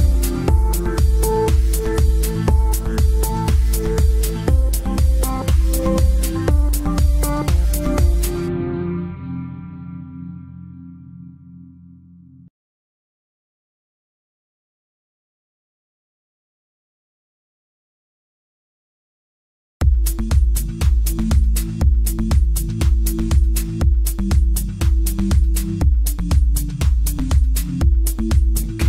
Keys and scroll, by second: 23.6 shift+F2, 24.0 Escape.